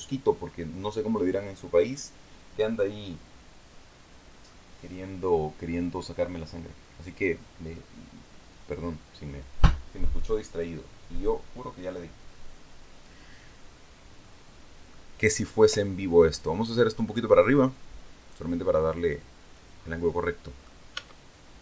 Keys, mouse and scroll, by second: 13.8-14.2 scroll down 2, 14.4 middle click, 15.8-19.2 drag, 19.2-19.5 scroll down 2, 19.7 middle click, 20.4 Tab, 21.2 middle click.